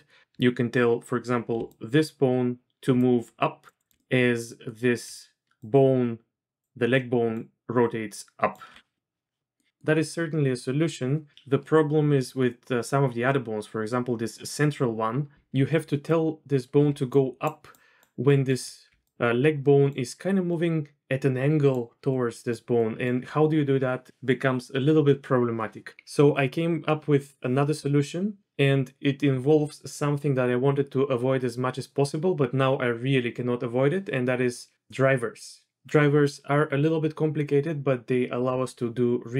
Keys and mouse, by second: 1.5 d, 1.7-2.7 drag, 2.7 d, 2.9-4.0 d, 2.9-4.7 drag, 5.0 d, 5.6-8.6 drag, 5.6-8.6 d, 8.9-9.6 drag, 9.7 click, 16.8-18.6 d, 17.1 click, 17.7 click, 18.8-23.3 d, 19.0 click, 22.7 click.